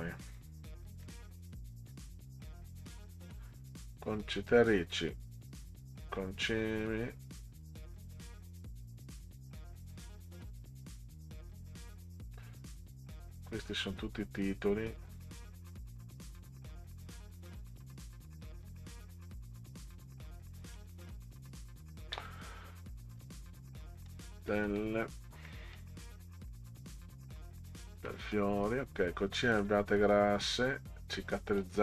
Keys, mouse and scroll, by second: 0.3 scroll up 2, 1.0 click, 1.3 click, 2.4 scroll down 2, 13.5-14.0 scroll down 4, 14.6 scroll down 2, 16.1 scroll down 2, 17.9 click, 19.4 scroll down 2, 20.8 click, 23.1 scroll down 2, 23.8 middle click, 24.5 middle click, 25.5 middle click, 26.5 middle click, 27.3 middle click, 28.1 middle click, 29.5-31.6 middle drag.